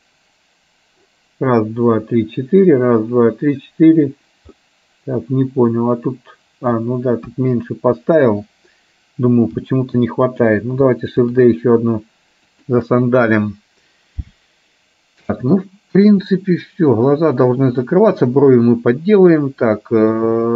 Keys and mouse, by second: 4.8-6.8 middle drag, 7.3 KP_1, 9.6 g, 11.3 shift+d, 18.0-20.5 middle drag.